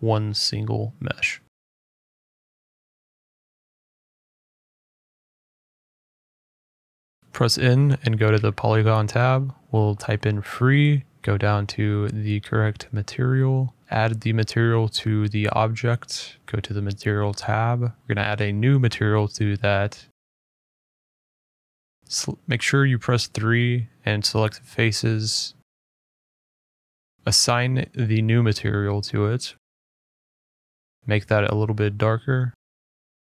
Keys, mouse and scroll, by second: 0.7 k, 1.0 middle click, 2.7 click, 3.9 click, 4.7 click, 5.7 click, 6.4 click, 6.8 click, 7.4-7.8 typing, 9.0 middle click, 9.3-9.8 typing, 9.9 Return, 11.9 click, 12.9 click, 13.1 click, 14.4 click, 15.1 click, 15.9 middle click, 16.2 middle click, 16.2 middle click, 16.5 f, 16.6 shift+middle click, 16.7 middle click, 19.0 click, 21.8 click, 22.0-22.4 scroll, 22.8 click, 25.9 click, 27.1 middle click, 27.1 middle click, 27.7 click, 29.4 middle click, 29.4 middle click, 30.1 shift+middle click, 30.8 middle click, 31.0 click, 31.1 click.